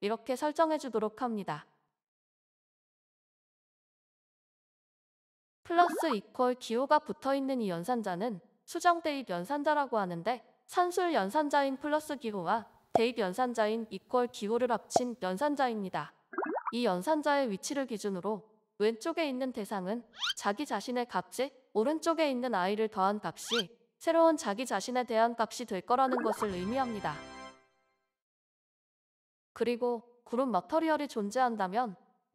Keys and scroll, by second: 8.7-10.0 typing, 11.3 Return, 11.3 typing, 14.4-15.6 typing, 15.9 Return, 26.4 typing, 30.2 Down, 30.2 Return, 31.4-32.1 typing.